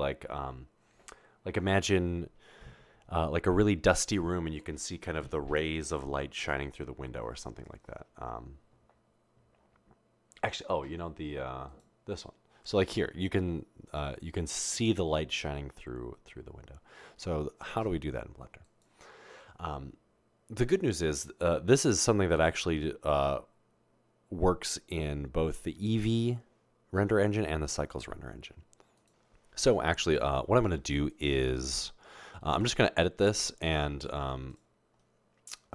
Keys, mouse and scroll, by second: 32.7 Tab.